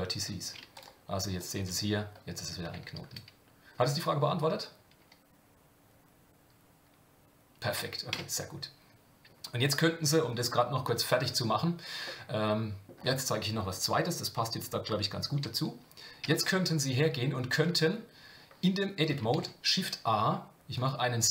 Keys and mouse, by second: 8.1 Tab, 12.0 middle click, 16.2 Tab, 19.3 shift+a.